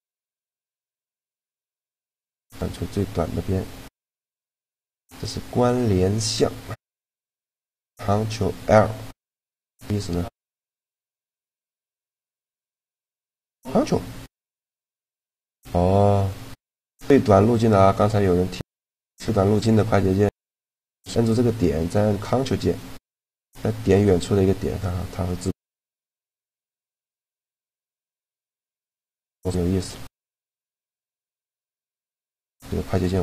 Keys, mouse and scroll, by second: 0.9 a, 1.9 click, 2.9 click, 9.1 click, 9.2-13.3 middle drag, 13.3-16.1 right drag, 16.1 click, 18.6-20.4 middle drag, 20.5-22.0 right drag, 22.0 middle click, 23.2-24.6 right drag, 24.6-26.3 middle drag, 26.5-28.2 middle drag, 27.7-31.3 right drag, 30.7-31.8 drag, 30.9 a.